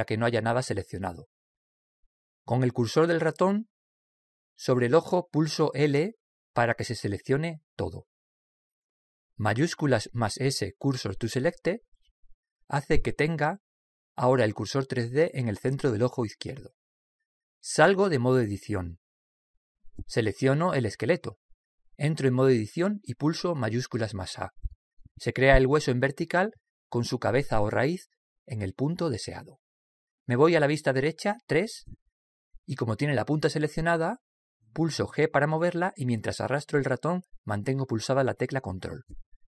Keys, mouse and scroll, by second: 6.0 l, 10.5 shift+s, 18.6 Tab, 20.7 right click, 22.8 Tab, 24.7 shift+a, 29.4 middle click, 32.0 KP_3, 35.5 g.